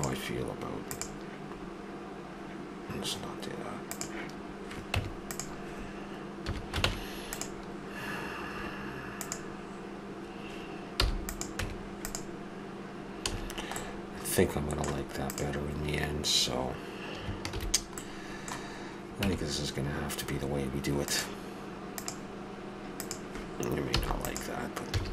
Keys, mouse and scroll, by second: 1.2-2.5 middle drag, 2.5 click, 2.8-3.9 middle drag, 3.9-6.2 drag, 4.9 Tab, 6.2 middle click, 6.4 a, 6.8 ctrl+Tab, 9.1-11.0 drag, 10.9 i, 11.6 Tab, 13.3 a, 15.2-16.2 drag, 16.9 click, 17.5 shift+h, 17.9-20.3 middle drag, 19.4 Tab, 22.1 Tab, 23.9 i, 24.9 a.